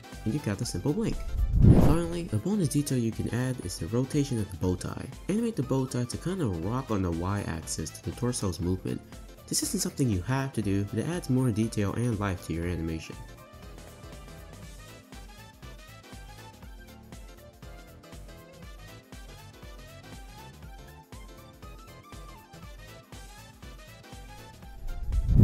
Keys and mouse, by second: 1.8 shift+middle drag, 2.3 middle drag, 2.5 click, 4.7 click, 5.8 click, 6.0 drag, 6.0 middle drag, 6.4 space, 6.5 space, 6.9 r, 8.1-10.7 typing, 12.1-14.5 typing, 15.6-17.1 typing, 18.3 click, 18.8 click, 18.9 space, 20.0-21.7 typing, 20.4 click, 22.7 click, 22.8 space, 24.9 space.